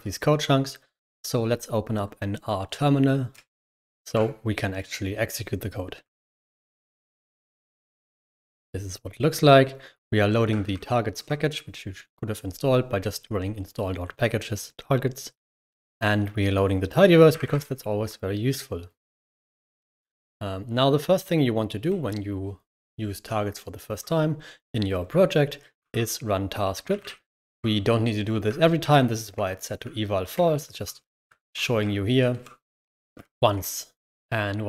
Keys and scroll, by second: 3.5 c, 3.9 r, 6.1 ctrl+h, 7.0 ctrl+Return, 10.7 shift+v, 11.0 Escape, 17.3 ], 25.8-27.4 typing, 26.6 Escape, 28.8 typing, 29.1 Escape, 30.2 shift+v, 30.6 Escape, 31.3 ctrl+_, 32.2 ctrl+_, 33.1 ctrl++, 33.4 ctrl++, 34.2-34.6 typing.